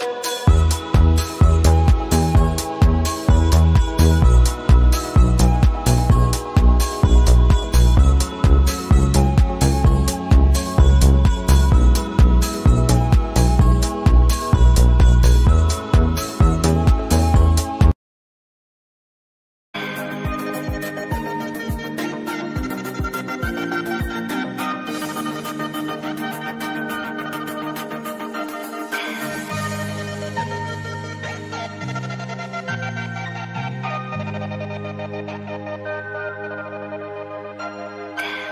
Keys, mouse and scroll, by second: 1.9 click, 3.0 alt+scroll up 1, 5.4 v, 5.6 click, 7.6 Down, 9.6 Down, 11.3 click, 12.6 click, 12.8 right click, 13.6-16.9 drag, 17.1 click, 18.8 alt+click, 20.0 alt+click, 24.7 alt+click, 32.8 alt+scroll down 1, 33.2 space, 33.5 space, 33.9-38.5 drag.